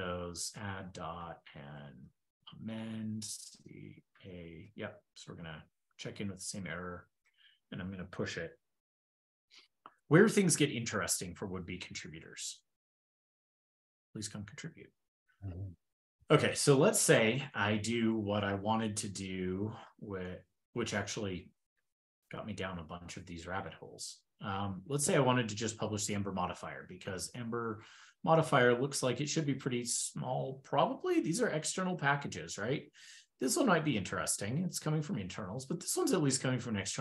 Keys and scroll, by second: 2.8 ctrl+e, 4.4 ctrl+e, 10.8 super+Tab, 13.2 super+p, 19.8 super+f, 26.7 super+p.